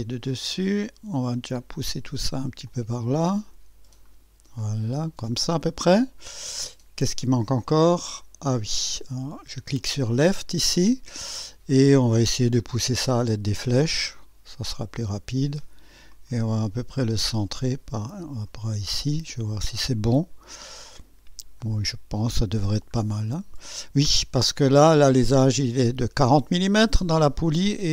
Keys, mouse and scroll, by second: 0.2 click, 2.6-5.8 drag, 6.3-6.6 scroll down 2, 7.6-8.9 drag, 9.7 click, 10.8 scroll up 2, 11.6 scroll up 2, 12.1 scroll down 2, 14.1-18.6 drag, 18.8-19.2 scroll up 2, 19.4-20.2 right drag, 21.6 click, 23.0-23.3 scroll down 2, 24.1 scroll up 2.